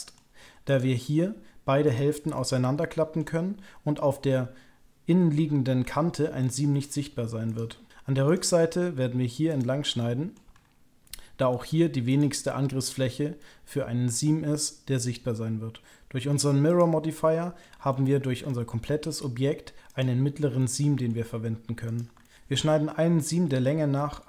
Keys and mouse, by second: 0.7 ctrl+click, 1.8 ctrl+click, 2.3 click, 5.8 middle click, 6.4 shift+click, 7.5 ctrl+click, 9.4 ctrl+click, 9.9 shift+click, 11.1 click, 12.0 ctrl+click, 13.3-15.8 middle drag, 16.6 ctrl+click, 17.0 middle click, 17.9 shift+middle click, 18.1 shift+middle click, 18.5 middle click, 19.8 ctrl+click, 20.6 middle click, 21.8 ctrl+click, 22.2 shift+click.